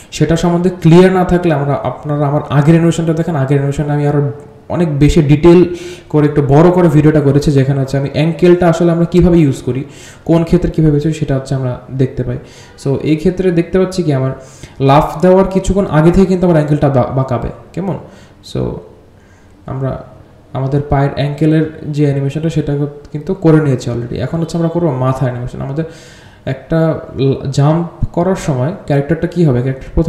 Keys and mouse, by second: 0.7-1.0 drag, 1.9-3.1 drag, 3.9 g, 4.9-5.6 drag, 6.7-7.0 alt+drag, 7.7 click, 7.9 space, 9.1-10.9 drag, 11.5 r, 12.1 click, 12.5 r, 13.4 click, 13.5 r, 15.7-17.7 drag, 17.8 r, 18.2-18.9 drag, 19.1 r, 20.5-23.0 drag, 23.4 r, 23.9-24.5 drag, 25.6 r, 25.8 space, 26.7-29.0 drag, 29.6-30.0 drag.